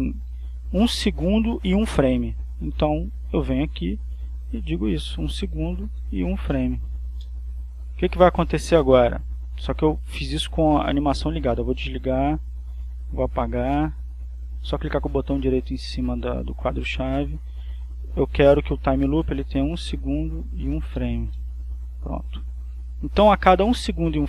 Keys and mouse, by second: 3.6 click, 4.4-5.6 drag, 6.3 1, 6.8 f, 7.6 Return, 11.7 click, 13.8 click, 16.3 click, 17.1-18.4 drag, 19.3-20.6 drag, 21.0 1, 21.3 f, 21.7 Return, 22.9-24.2 drag.